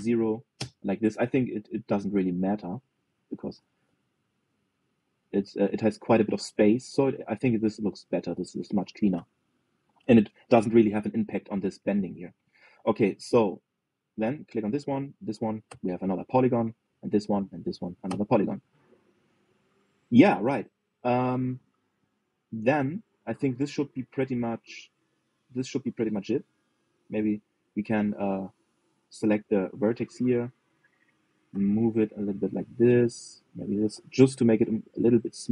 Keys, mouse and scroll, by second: 2.6 g, 8.0 middle click, 8.5 scroll down 2, 8.8-13.5 middle drag, 13.5-15.2 scroll up 2, 15.2 click, 15.8 shift+click, 16.4 f, 16.9 scroll down 1, 17.1 middle click, 17.6 click, 18.2 shift+click, 18.8 f, 19.1 scroll down 1, 19.7 scroll down 4, 20.0-21.8 middle drag, 21.8 scroll down 1, 22.1 middle click, 22.6 click, 22.9 middle click, 23.8 scroll up 1, 24.1-25.3 middle drag, 25.3 scroll down 1, 25.7-27.4 middle drag, 27.4 scroll up 1, 27.6 shift+middle click, 28.0 scroll up 1, 28.3-29.9 shift+middle drag, 29.9 click, 31.7 g, 34.1 click, 34.5 g.